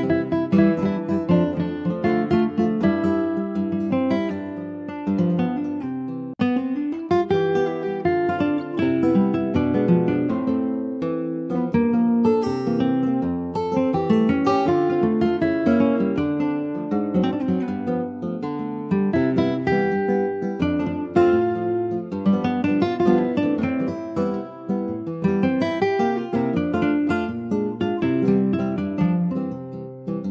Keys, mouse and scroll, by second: 0.1 shift+middle click, 0.5 Tab, 0.7 click, 1.0 middle click, 1.8 alt+shift+click, 2.4 alt+shift+click, 3.2 middle click, 4.1 click, 4.5 click, 4.9 shift+click, 5.5 shift+click, 5.9-7.0 middle drag, 7.0 e, 9.2 3, 9.4 click, 10.3 2, 10.4 click, 11.3 alt+shift+click, 11.7 middle click, 12.3 ctrl+b, 17.8 Tab, 18.5 scroll down 2, 18.7 middle click, 19.3 click, 19.6-20.7 right drag, 20.7-21.8 middle drag, 21.8 click, 22.0 click, 22.3 scroll down 3, 22.5-24.0 middle drag, 24.0 ctrl+s, 24.3-25.5 shift+middle drag, 25.5 ctrl+s, 25.6 middle click, 25.9-26.7 scroll up 3, 26.1 shift+middle click, 26.7 middle click, 27.2 Tab, 27.6 shift+middle click, 27.9-28.2 shift+scroll up 1, 28.2 middle click, 29.2 ctrl+f, 30.2 middle click.